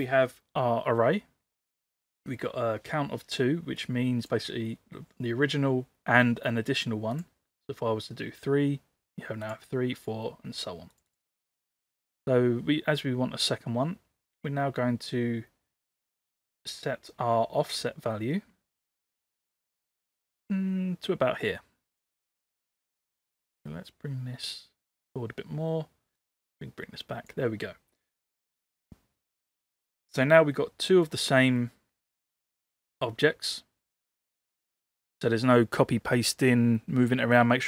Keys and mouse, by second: 3.8 click, 7.2 click, 9.5 click, 10.0-11.3 drag, 14.4-22.0 drag, 23.7-25.1 drag, 26.1-27.3 drag, 30.5-31.1 middle drag, 31.6-32.4 middle drag, 34.6 click.